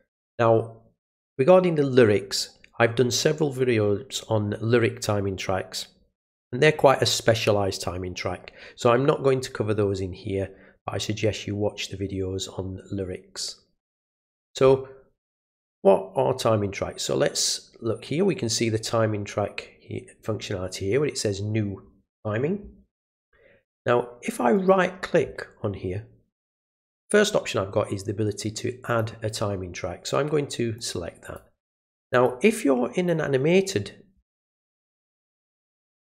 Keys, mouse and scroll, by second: 24.5 right click, 28.9 click, 30.7-31.3 drag, 32.1 click, 33.0-33.6 drag.